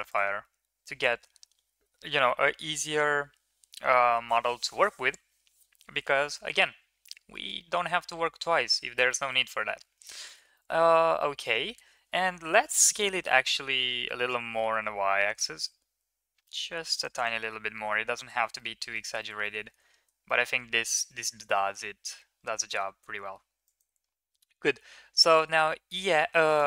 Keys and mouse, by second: 0.0 click, 0.2 Tab, 7.1 shift+middle drag, 8.9 middle drag, 9.7 Tab, 10.3 middle click, 10.7 middle click, 11.3 middle drag, 12.3 s, 17.6 KP_1, 18.4-18.8 middle drag, 19.0 shift+middle click, 19.3 middle drag, 19.8 ctrl+s, 20.1 middle drag, 20.8 KP_1, 22.6 Tab, 23.1-23.5 shift+middle drag, 23.5 click, 25.3 e.